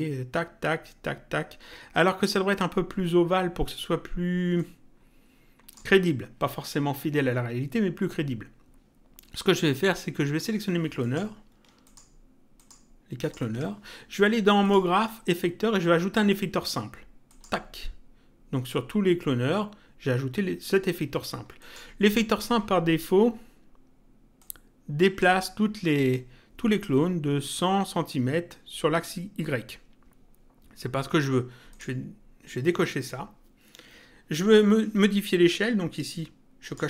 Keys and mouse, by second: 4.5 click, 9.9 click, 11.8 ctrl+click, 14.6 click, 17.2 click, 21.6 click, 24.4 click, 31.6 click, 36.6 click.